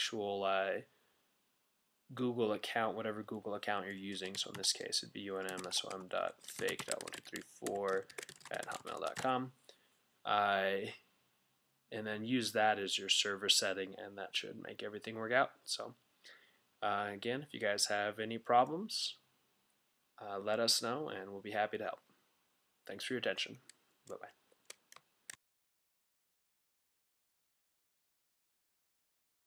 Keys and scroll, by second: 3.9-9.7 typing.